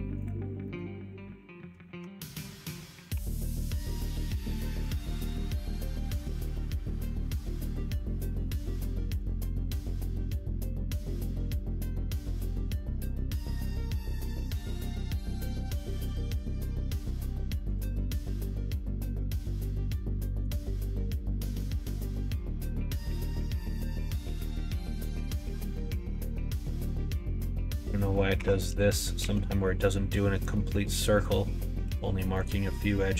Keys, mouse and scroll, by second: 0.1 click, 0.5 middle click, 1.9 Tab, 3.0 3, 3.5 middle click, 4.2 shift+click, 4.4 q, 5.2 Tab, 5.8 middle click, 7.5-8.6 drag, 9.1 click, 9.4 q, 14.0-15.2 middle drag, 16.8 click, 20.4 click, 21.5 middle click, 23.6 click, 24.0-25.1 middle drag, 25.4 middle click, 26.2 Tab, 28.3 3, 28.6 click, 29.1 q, 31.7 q, 33.0 middle click.